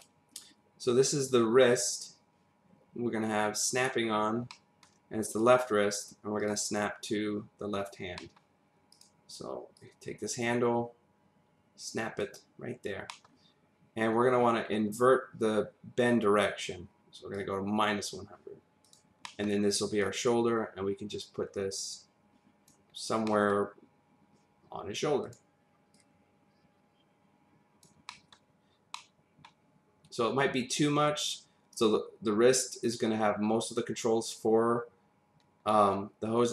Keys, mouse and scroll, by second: 1.1 click, 3.8 click, 4.1-4.5 scroll up 1, 4.5 middle click, 6.4 click, 8.1 middle click, 8.9 click, 9.7 click, 12.7 scroll down 1, 13.1 middle click, 17.3 click, 18.8 click, 19.3 middle click, 20.0 click, 22.9 scroll up 1, 23.2 middle click, 25.2 click, 26.0 click, 28.1 middle click, 28.5-28.9 scroll down 1, 28.9 middle click, 31.7 click.